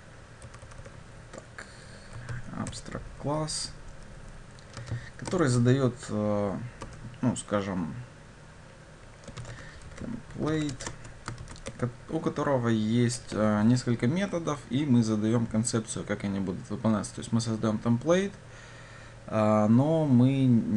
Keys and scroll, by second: 2.7 Return.